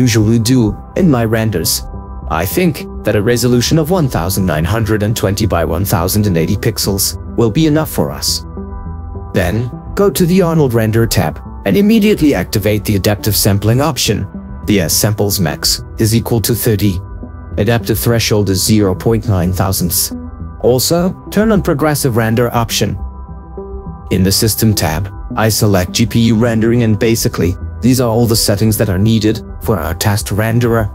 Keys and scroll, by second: 0.2 ctrl+4, 4.1 1, 4.5 9, 5.0 2, 5.3 0, 15.9 3, 16.4 0, 16.7 Return, 18.1 BackSpace, 18.5 Return, 18.8 BackSpace, 18.9 0, 19.4 9, 19.8 Return.